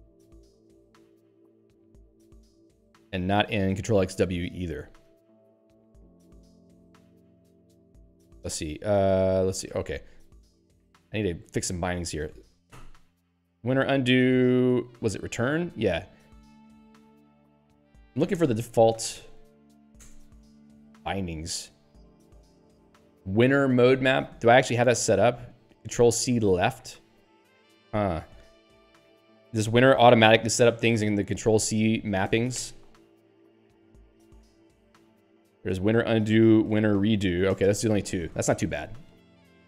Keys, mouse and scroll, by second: 0.7 scroll down 1, 1.6 scroll up 1, 2.2 scroll up 1, 5.0 click, 5.7 q, 6.8 alt+x, 7.0-7.7 typing, 8.3 ctrl+g, 9.8 ctrl+g, 11.6 click, 15.1 Return, 18.4 Return, 21.3-22.1 scroll down 3, 27.9 click, 32.6 ctrl+h, 35.5 scroll down 1, 36.3-37.4 typing, 37.5 ctrl+g.